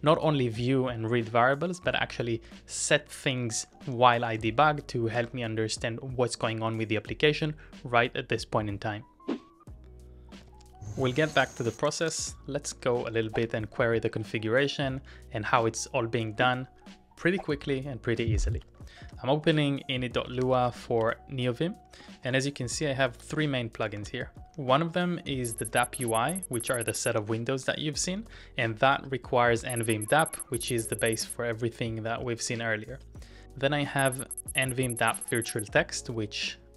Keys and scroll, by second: 0.9-1.3 typing, 2.5 ctrl+d, 2.8 ctrl+d, 3.2 ctrl+d, 4.2 ctrl+u, 4.4 ctrl+u, 4.6 ctrl+u, 5.2 ctrl+w, 5.3 l, 9.2 typing, 10.2-11.0 typing, 12.7-14.0 typing, 21.2-24.5 typing, 26.5-28.0 typing, 32.1 shift+v, 33.0 shift+v, 34.2 j, 34.7 shift+v, 35.9 shift+v, 36.6 j.